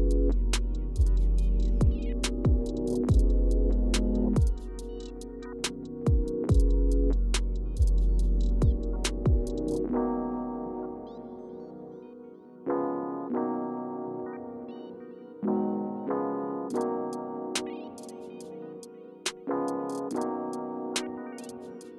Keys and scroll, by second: 0.0 super+z, 2.7 Return, 7.8 Right, 8.5 Left, 8.9 Right, 12.5 Right, 12.7 Right, 13.0 typing, 21.2 super+y, 21.8 super+y.